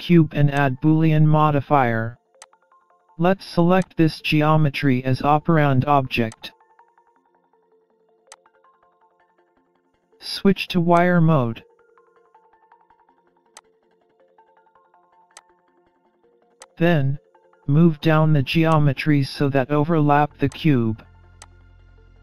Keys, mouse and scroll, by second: 0.1-0.9 scroll up 3, 0.3 middle click, 1.6 alt+z, 1.9-2.6 scroll down 3, 2.6 Tab, 3.2-3.5 scroll down 3, 3.5-4.2 scroll up 3, 4.2 click, 6.0 click, 8.3-8.8 scroll down 2, 10.0 click, 13.0-13.4 scroll up 1, 13.4 middle click, 14.6 click, 17.2 click, 17.6-18.4 scroll down 7, 18.4-18.9 scroll down 5, 19.0 click, 21.1-21.5 scroll up 1.